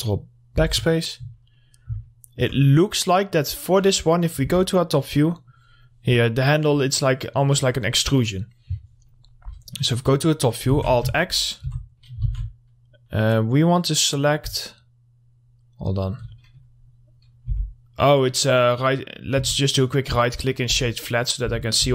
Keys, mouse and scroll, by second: 1.7 middle click, 1.9 scroll down 1, 2.2 alt+middle click, 3.4 scroll up 1, 5.6 click, 6.9 scroll up 1, 7.1 click, 8.1 scroll down 1, 8.6 click, 9.3 middle click, 9.4 scroll down 1, 10.1 middle click, 10.5 scroll up 1, 10.9 alt+x, 11.3 middle click, 11.5 scroll up 1, 11.8 1, 12.2 middle click, 12.4 alt+x, 14.7-16.6 alt+middle drag, 16.9-17.7 scroll up 1, 17.7 2, 18.5 right click, 19.6 Tab, 19.7 right click, 20.5 click, 20.9 Tab, 21.6-21.9 typing.